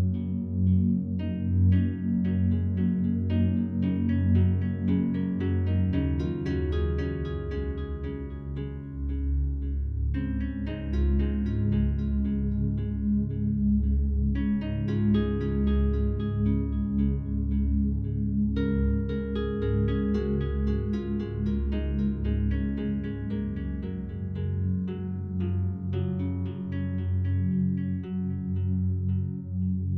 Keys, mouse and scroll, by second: 3.1 shift+s, 4.6-6.7 alt+drag, 6.7 scroll up 1, 7.7 scroll down 1, 8.0-12.4 alt+drag, 12.4-12.9 scroll up 1, 13.1-22.8 alt+drag, 24.0-26.9 alt+drag, 26.9 shift+a.